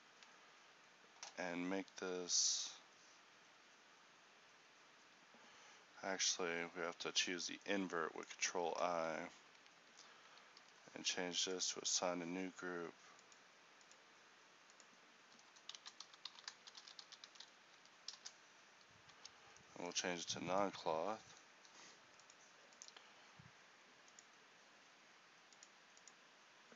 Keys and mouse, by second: 6.1 ctrl+i, 8.6 z, 10.7 ctrl+g, 14.1-19.2 drag, 19.2 Tab, 20.2 a.